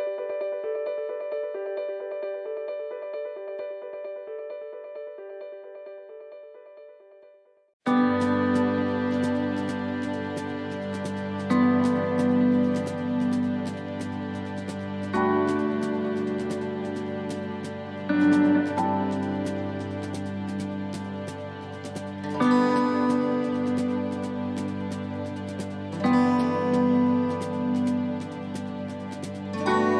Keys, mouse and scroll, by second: 0.1 ctrl+r, 1.7 s, 2.9 ctrl+r, 3.9 s, 5.4 middle click, 5.8-6.4 scroll down 3, 6.5 middle click, 7.0 scroll up 2, 7.4 middle click, 7.8-8.2 scroll up 1, 8.4 shift+middle click, 8.8-9.2 scroll up 2, 9.2 middle click, 9.6-10.0 scroll down 1, 10.0 middle click, 10.6 shift+middle click, 11.4 scroll up 1, 11.7 shift+middle click, 12.5 scroll down 1, 13.3 middle click, 13.8-14.2 scroll down 2, 14.6 middle click, 15.2 scroll up 1, 15.6 shift+middle click, 16.4 scroll down 1, 16.8 middle click, 17.4 scroll up 1, 18.1 middle click, 18.6 scroll down 1, 19.0 shift+middle click, 20.5 scroll down 1, 20.9 middle click, 21.3 shift+middle click, 22.8 click, 24.0 scroll down 1, 24.5 middle click, 25.1 scroll down 1, 25.5 shift+middle click, 25.9-26.3 scroll up 1, 27.8 click, 28.8 scroll up 1, 29.3 middle click.